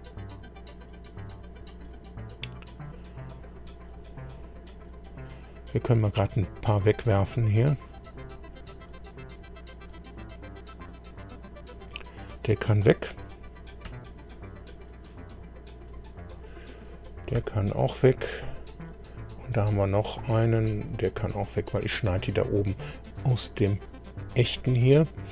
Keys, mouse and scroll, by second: 6.0 click, 7.6-8.7 middle drag, 9.9 click, 11.8 click, 13.9 Delete, 15.0 click, 17.4 Delete, 18.6 scroll up 1, 19.7 click, 20.7 Delete, 23.2-23.5 scroll down 2.